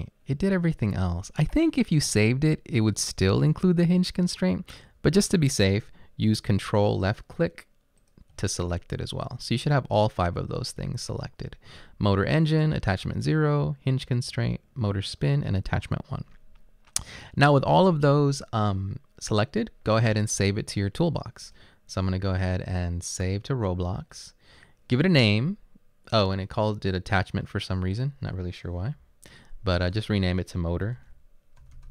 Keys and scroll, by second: 29.5 BackSpace, 31.0-31.9 typing.